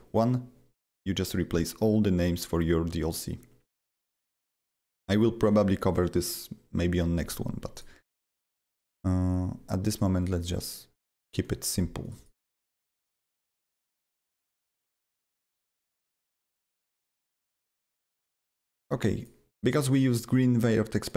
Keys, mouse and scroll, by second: 3.7 click, 4.5 click, 7.7 click, 8.6 click, 8.7 double click, 10.2 click, 12.0 click, 12.1 double click, 14.7 click, 14.8 double click, 15.4 click, 15.5 double click, 19.2 click, 21.0 click.